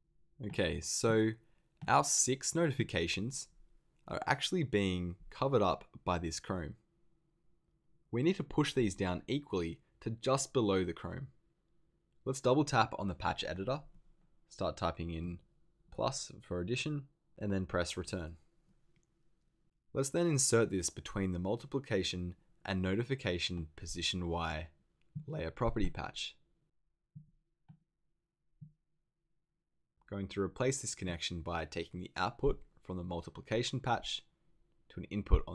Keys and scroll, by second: 15.8 shift+=, 18.0 Return.